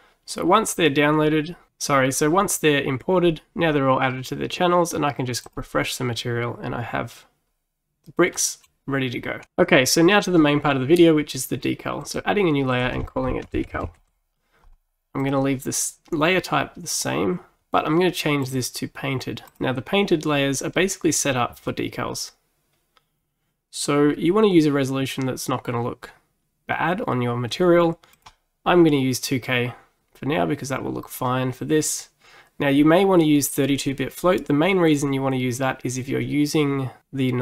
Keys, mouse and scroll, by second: 5.5-8.4 drag, 8.4-9.5 middle drag, 12.1-15.2 drag.